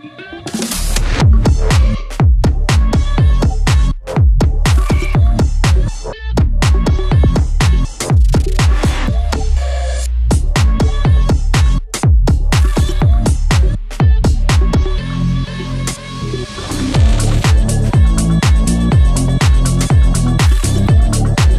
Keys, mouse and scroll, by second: 0.1-2.5 drag, 2.9 scroll down 1, 4.6 click, 4.9 scroll up 1, 5.2 click, 6.2 right click, 7.1-12.8 drag, 13.4 click, 20.6 click, 20.9 scroll down 1, 21.3 scroll up 1.